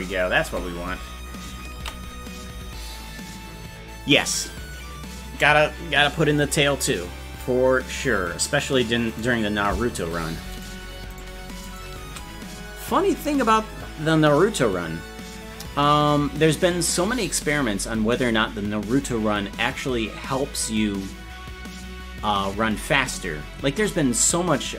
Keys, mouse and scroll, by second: 1.9 ctrl+s, 1.9 space, 9.4 right click, 10.6-14.1 shift+right drag.